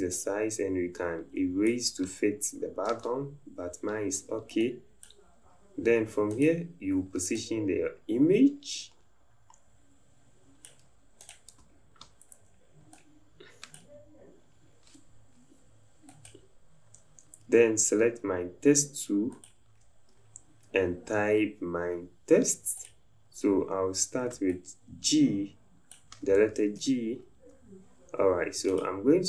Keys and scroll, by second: 2.8 ctrl+z, 4.1 c.